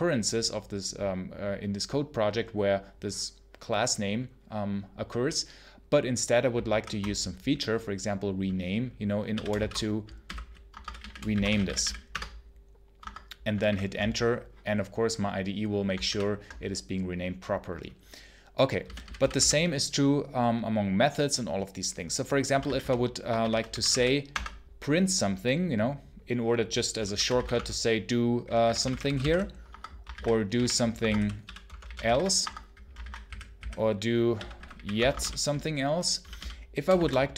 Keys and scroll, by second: 6.5 shift+F6, 8.9-12.0 typing, 12.8 Escape, 13.5 alt+1, 15.9 alt+1, 18.7 j, 22.1-24.2 typing, 26.7-36.8 typing, 30.0 ctrl+d, 32.9 ctrl+d.